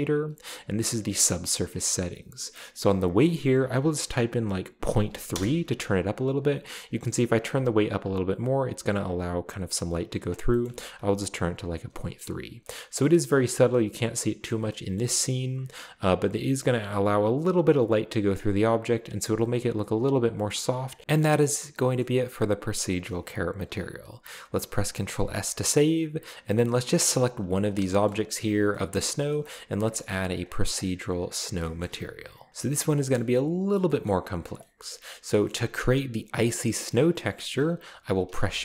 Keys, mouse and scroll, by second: 3.1 click, 5.1 typing, 5.3 Return, 6.5-7.4 scroll down 2, 7.4 click, 10.7-11.4 ctrl+middle drag, 10.7 ctrl+z, 11.9 shift+middle click, 12.2-12.6 shift+middle drag, 12.4-13.2 shift+scroll up 1, 13.0 shift+middle drag, 14.5 middle drag, 15.0-15.9 shift+middle drag, 17.3-19.0 drag, 18.8 right click, 20.0-21.0 scroll down 2, 20.5 middle drag, 21.1 middle click, 21.2 middle click, 21.5-22.5 scroll down 3, 25.2 ctrl+s, 26.2-26.7 scroll down 1, 26.5-27.0 middle drag, 27.0 scroll down 1, 27.4-28.1 right drag, 28.9 middle click, 29.5-30.6 scroll up 1, 30.1 click, 31.5-32.9 scroll down 3, 31.6 shift+middle click, 32.5 middle click, 32.5 h, 33.2 middle click, 34.1-34.6 middle drag, 34.8-35.4 middle drag, 35.5-36.3 middle drag, 36.9-37.8 middle drag, 38.3 shift+a.